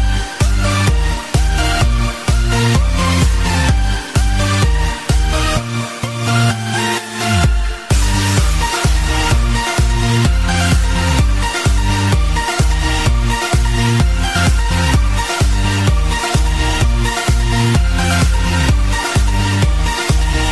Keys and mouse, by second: 0.9 click, 2.5 click, 7.2 click, 8.3 click, 8.3 KP_0, 8.3 KP_9, 9.0 Return, 10.2 right click, 11.0 Return, 11.0 right click, 11.0 click, 11.0 KP_0, 11.0 KP_9, 11.0 click, 12.0 click, 14.3 click, 14.3 right click, 14.5 click, 14.9 space.